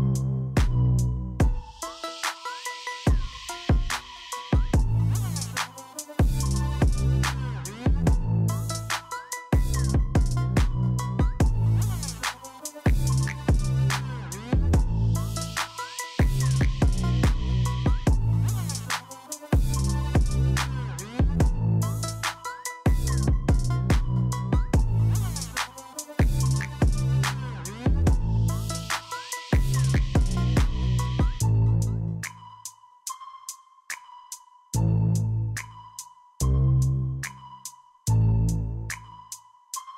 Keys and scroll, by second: 1.0 Tab, 2.5 space, 4.5 Tab, 5.9 Tab, 15.5 Return, 16.5 Tab, 17.9 Return, 19.4 alt+a, 21.4 super+r, 23.4 Return, 30.6 space, 33.4 Escape, 35.4 alt+d, 36.8 alt+a, 38.3 super+r, 39.9 Return.